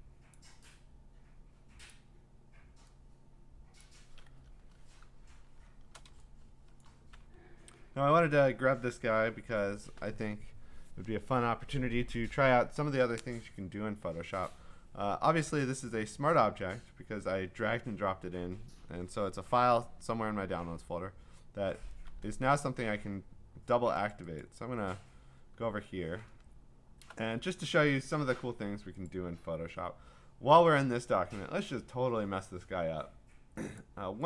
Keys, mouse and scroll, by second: 0.3 click, 1.9 click, 3.8 click, 4.4 Return, 5.4 scroll, 6.6 scroll, 6.9 click, 7.4 v, 24.1 click, 24.4 click, 25.8-28.4 scroll, 29.2 click.